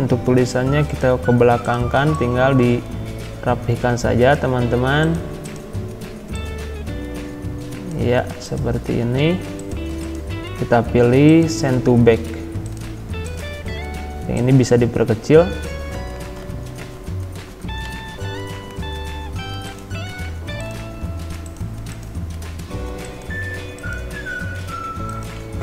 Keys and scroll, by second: 16.9 shift+Right, 17.9 ctrl+[.